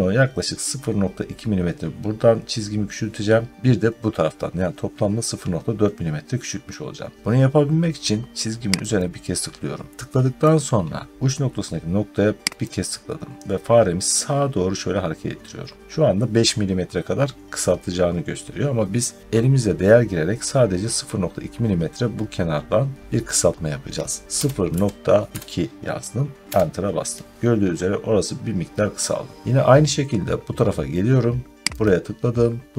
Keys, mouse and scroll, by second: 6.3 scroll up 1, 7.1 scroll down 1, 8.8 click, 12.5 click, 24.2-25.3 typing, 26.3 Return, 31.7 click.